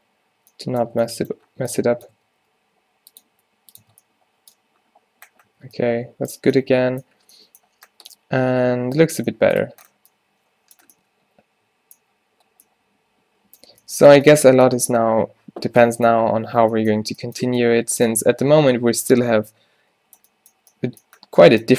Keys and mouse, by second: 0.6 Tab, 0.9 Tab, 2.4 Tab, 2.5 g, 3.4 r, 3.9 Tab, 5.6 a.